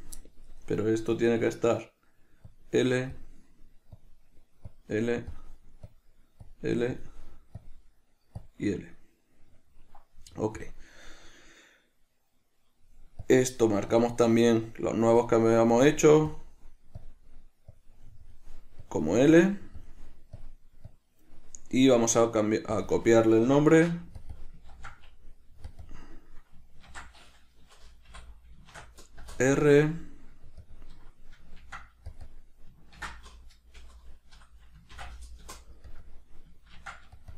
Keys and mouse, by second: 1.4-3.5 drag, 4.3-5.6 drag, 6.1-7.3 drag, 7.9-9.7 drag, 9.7 middle click, 10.9 drag, 13.5-15.1 drag, 15.5-16.7 drag, 17.3-18.6 drag, 19.1-20.1 drag, 20.7-23.1 drag, 23.2-24.5 drag, 24.6 click, 25.0 ctrl+v, 26.1-32.4 drag, 29.5 Return, 32.5-37.3 drag, 35.8 Return.